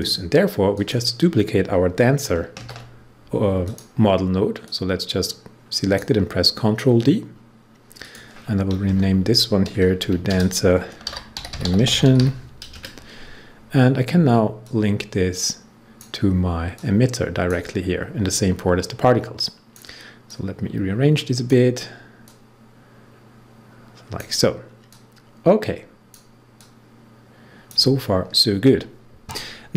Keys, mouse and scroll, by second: 2.5 ctrl+d, 3.6-7.2 drag, 7.2 scroll up 1, 7.9 click, 8.8 Return, 9.9 Right, 10.2-12.6 typing, 14.5-29.7 drag.